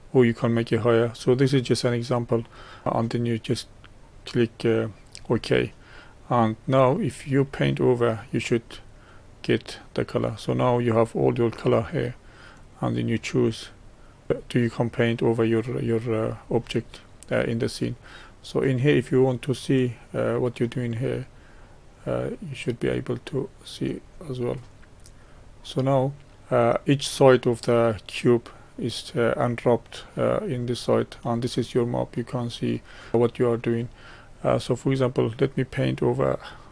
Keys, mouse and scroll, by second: 4.2-6.5 middle drag, 7.2-8.6 middle drag, 8.6-14.3 drag, 14.3 middle click, 14.9-16.5 drag, 16.5-20.8 middle drag, 20.8-23.2 drag, 23.2 middle click, 24.1-25.3 scroll down 5, 25.3-29.5 middle drag, 34.9-36.7 drag.